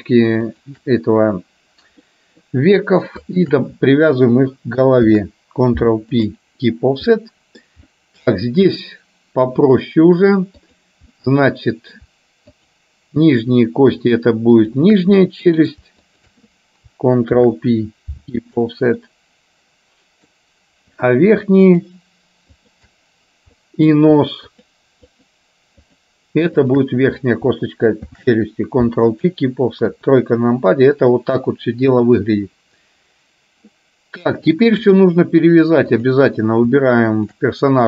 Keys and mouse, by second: 2.2 middle click, 3.4 shift+click, 5.1 ctrl+p, 7.1 middle click, 8.0 shift+middle click, 8.9 middle click, 10.7 click, 11.4 middle click, 12.7 shift+click, 13.4 shift+click, 14.0 shift+click, 14.7 shift+click, 15.2 middle click, 16.1 shift+click, 17.5 ctrl+p, 19.1-20.4 middle drag, 21.1 click, 21.7 shift+click, 22.6 shift+click, 23.6 middle click, 24.6-25.7 shift+drag, 25.9 shift+click, 26.7 shift+click, 28.1 ctrl+p, 30.0 KP_3, 34.5 click, 36.0 click, 37.4 shift+click.